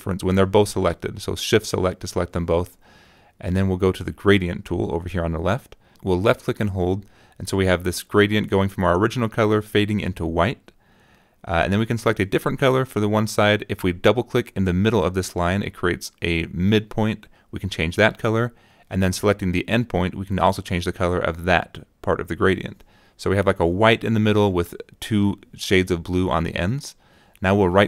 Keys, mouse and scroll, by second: 0.8 click, 2.1 click, 4.9 click, 7.0-9.2 drag, 11.0 click, 13.6 click, 16.3 click, 18.1 click, 19.9 click, 22.4 click, 24.1 click, 24.4 click, 26.3 right click.